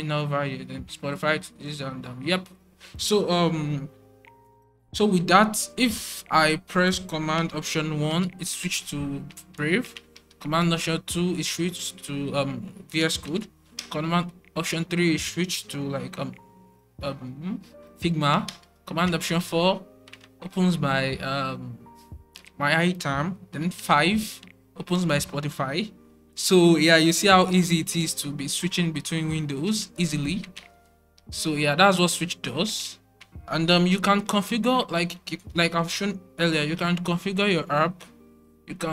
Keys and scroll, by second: 7.6 alt+super+1, 10.0 alt+super+2, 13.7 alt+super+3, 18.4 alt+super+4, 23.7 alt+super+5, 27.1 alt+super+1, 27.4 alt+super+2, 27.9 alt+super+4, 28.5 alt+super+3, 29.1 alt+super+4, 29.2 alt+super+1, 30.0 alt+super+4, 30.7 alt+super+1, 31.1 alt+super+2, 31.6 alt+super+4, 32.1 alt+super+1, 32.8 alt+super+4, 33.5 alt+super+1, 33.8 alt+super+2, 34.4 alt+super+1, 35.3 alt+super+4, 36.4 alt+super+`, 37.1 shift+super+`.